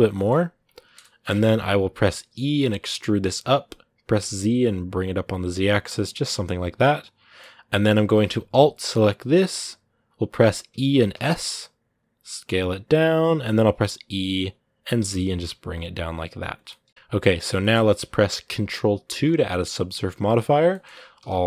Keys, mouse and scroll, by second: 6.0-7.6 middle drag, 7.6-9.1 scroll up 1, 10.5 e, 16.4 scroll down 1, 16.4 middle click, 17.2 scroll up 2, 17.4-18.8 middle drag, 18.8 ctrl+2, 20.5-21.4 middle drag.